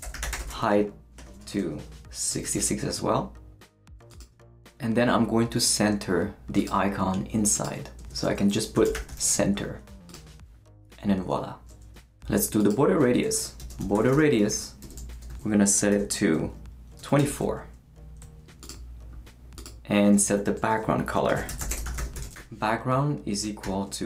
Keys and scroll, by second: 0.0-1.2 typing, 2.3 shift+6, 8.0-9.7 typing, 13.0-17.7 typing, 20.1-24.0 typing.